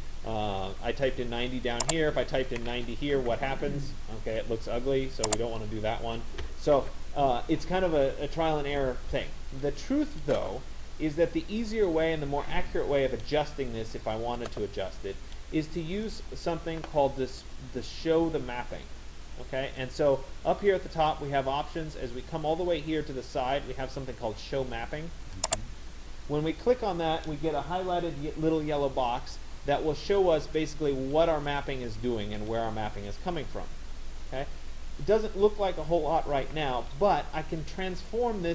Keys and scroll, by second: 0.5 Tab, 2.7 0, 3.2 Tab.